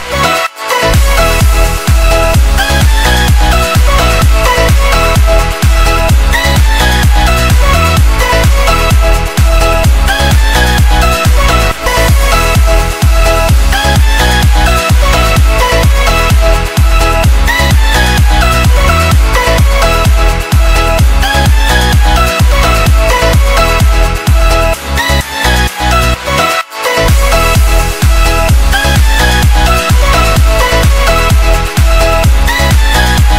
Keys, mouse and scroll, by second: 7.2 click, 8.9 alt+scroll up 1, 9.6 scroll up 1, 15.1 alt+Num_Lock, 15.6-16.2 scroll down 3, 17.9 click, 20.9 click, 26.3 click, 33.2 ctrl+Num_Lock.